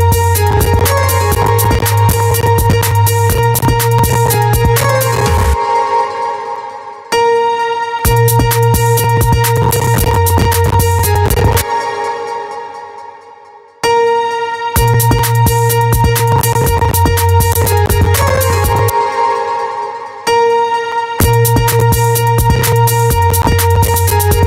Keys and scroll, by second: 5.0 space, 11.0 space, 18.3 space, 19.7 space.